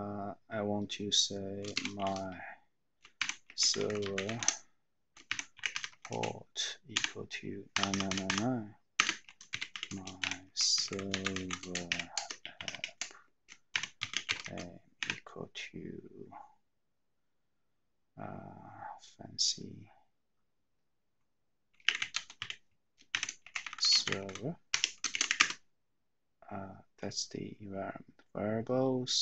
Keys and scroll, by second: 1.7-6.6 typing, 7.8-14.9 typing, 21.7-25.9 typing.